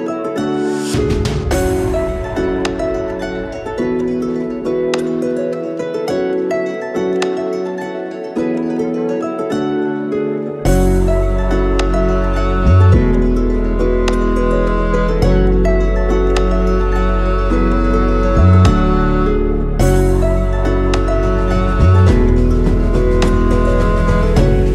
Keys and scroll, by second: 2.1 Tab, 3.7 Tab, 7.9 8, 8.4 F2, 12.1 Delete, 12.7 Tab, 13.3 Tab, 13.8 Delete, 17.2 Delete, 20.7 8, 20.9 F2, 23.4 Tab.